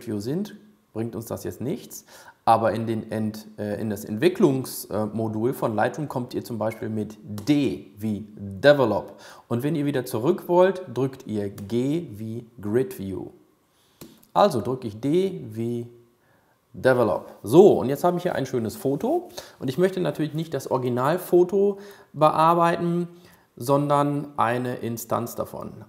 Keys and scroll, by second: 7.5 d, 12.1 g, 15.5 d.